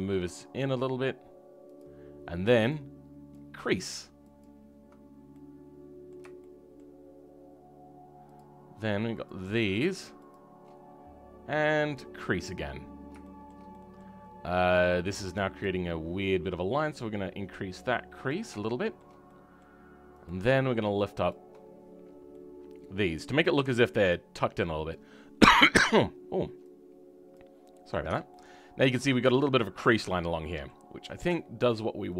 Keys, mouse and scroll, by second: 4.9-5.2 scroll down 2, 5.2-6.6 middle drag, 8.3 shift+click, 9.2 shift+click, 12.3-13.1 scroll up 3, 13.1-15.5 shift+middle drag, 15.5-18.6 drag, 18.6-20.2 shift+middle drag, 20.2-22.2 drag, 22.2-23.5 middle drag, 27.6-28.0 scroll down 3, 28.0 Tab, 28.2-29.7 middle drag, 29.7 scroll down 2, 30.0 middle click, 30.8-31.3 scroll up 2, 31.3 shift+middle click, 31.7 scroll up 1, 32.0 middle click.